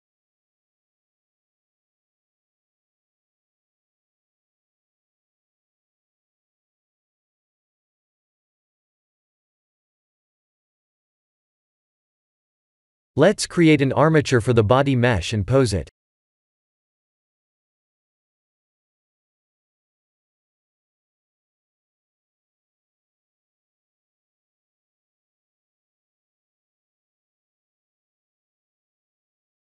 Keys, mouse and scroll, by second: 0.5 click, 3.7 click, 4.5 scroll down 1, 6.1 click, 6.1-6.6 scroll down 2, 6.9 click, 7.2 x, 8.1 click, 14.0 shift+a, 18.6 click, 19.5 click, 20.7 click, 23.3 Tab, 24.3 e, 26.1 e, 27.2 e, 28.2 e.